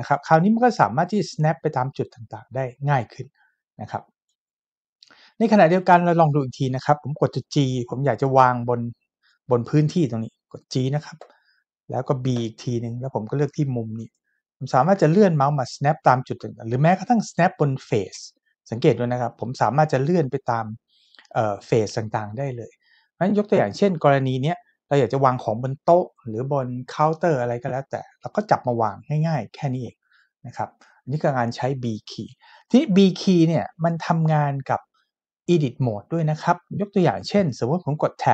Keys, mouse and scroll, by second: 11.2 g, 12.3 b, 14.0 click.